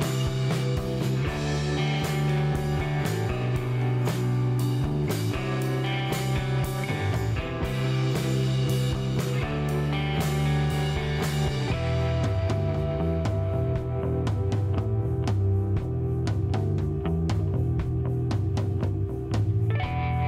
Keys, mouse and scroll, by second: 0.6 scroll up 1, 0.7-1.7 middle drag, 1.7 scroll up 1, 1.7 c, 3.4 right click, 3.5 middle click, 4.4 c, 7.0 right click, 7.2 middle click, 8.2 c, 10.4 middle click, 11.7 middle click, 12.3-13.6 drag, 14.0 click, 14.4-15.6 middle drag, 15.6 click, 16.4-18.3 drag, 18.1 middle click, 19.0 click, 19.5 middle click, 20.2 click.